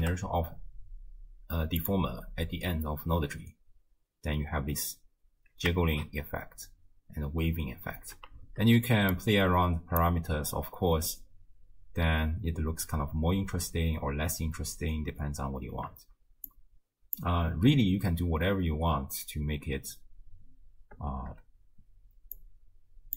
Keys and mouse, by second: 3.2 space, 5.9 shift+space, 8.0 space, 9.2 click, 10.4 space, 15.6 space, 16.5 click, 17.7 space, 20.3 space, 21.1 shift+space, 22.4 click.